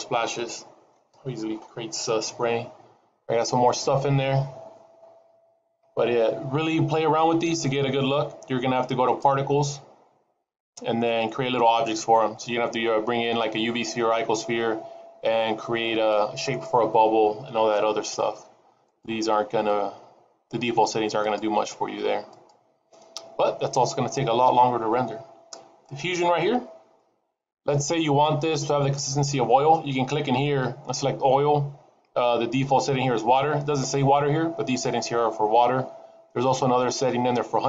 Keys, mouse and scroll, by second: 9.7 click, 13.0-16.4 scroll down 2, 19.5 click, 21.3 click, 22.4 click, 24.4-25.4 scroll down 3, 26.0 click, 27.0 scroll down 1.